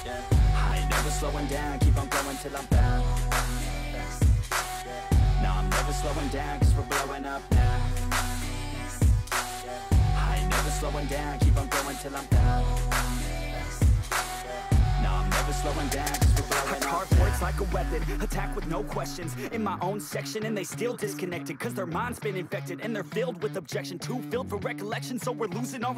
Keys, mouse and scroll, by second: 1.4 ctrl+d, 10.3 ctrl+click, 14.5 double click, 22.1 right click.